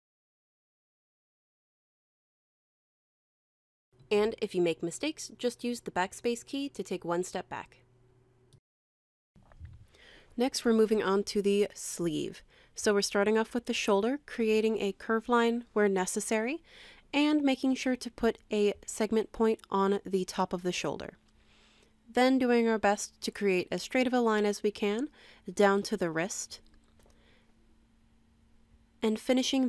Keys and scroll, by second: 2.9 BackSpace.